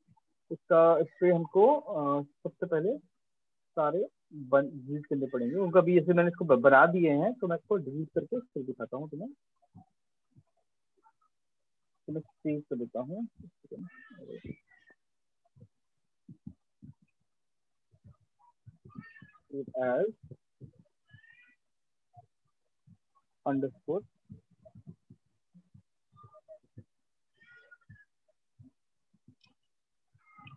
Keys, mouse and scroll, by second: 4.3 click, 6.2 click, 7.7 click, 9.2 click, 11.3 ctrl+shift+s, 14.4 click, 18.7 click, 21.9 click, 22.8-24.3 typing, 24.8 Return.